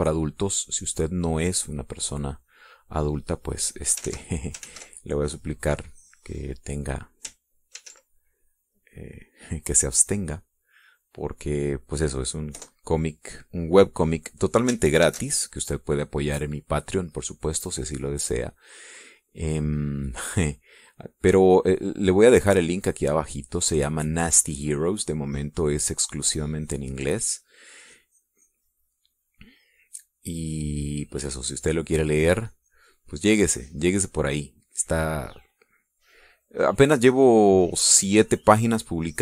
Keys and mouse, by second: 1.2 middle click, 1.8 middle click, 3.4 click, 4.1-5.2 drag, 5.2 ctrl+z, 6.3-7.9 ctrl+drag, 8.9 ctrl+t, 9.6-12.7 drag, 13.7 KP_Enter, 15.2 click, 16.2 ctrl+shift+a, 18.6-21.0 drag, 21.9-24.7 drag, 26.7 click, 27.8 click, 29.0-30.4 drag, 32.7 click, 37.5-39.2 drag.